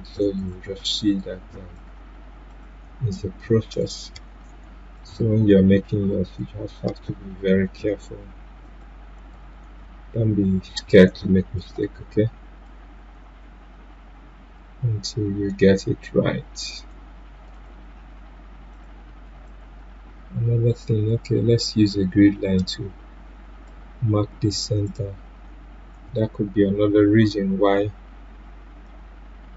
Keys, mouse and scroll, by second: 9.7 ctrl+z, 11.5-26.8 drag, 26.8 Delete, 27.6-29.5 drag.